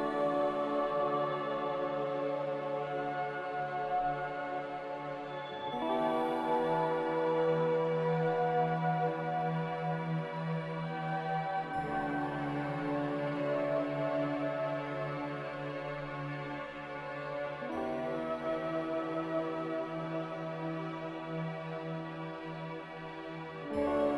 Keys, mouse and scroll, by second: 13.3 x, 14.8-16.5 typing, 19.7-20.8 typing, 22.9 v.